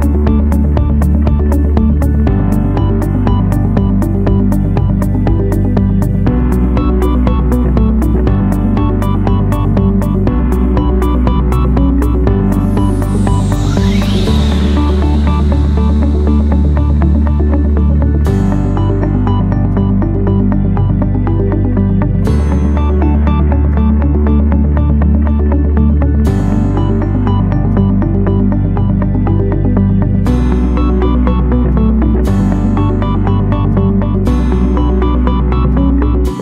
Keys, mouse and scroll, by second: 0.0 Return, 5.0 2, 5.6 0, 6.6 \, 7.2 2, 7.3 Return, 22.3 3, 22.8 Return.